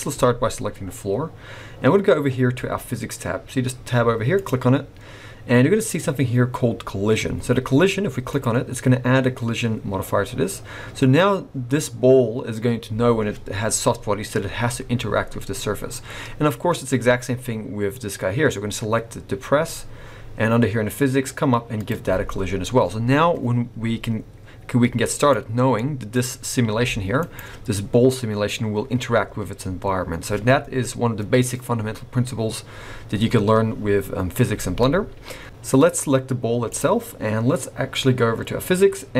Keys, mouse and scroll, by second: 4.3 click, 8.3 click, 16.1-16.5 scroll down 2, 17.9 click, 19.7-20.9 scroll up 2, 21.7 click, 25.2 click, 25.7 middle click, 26.1-26.5 scroll up 2, 26.7 g, 30.0-33.0 scroll down 1, 34.8 middle click, 35.4 g, 35.5 alt+a, 35.5 middle click, 36.6 click.